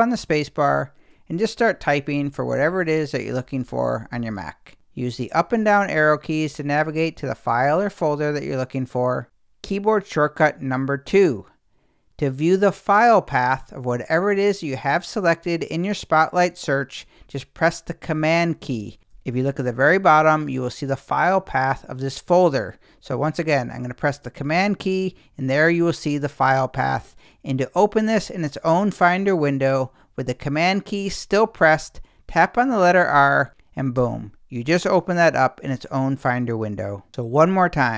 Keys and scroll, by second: 0.1 super+space, 1.6-4.6 typing, 4.9 Down, 6.2 Up, 33.1 super+r, 33.5 space.